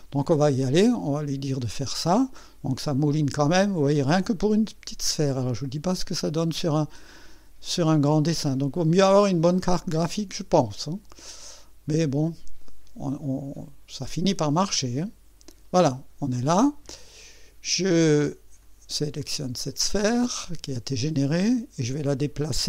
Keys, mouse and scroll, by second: 0.9 click, 17.2 click, 18.6 click, 19.7 right click, 21.4 click.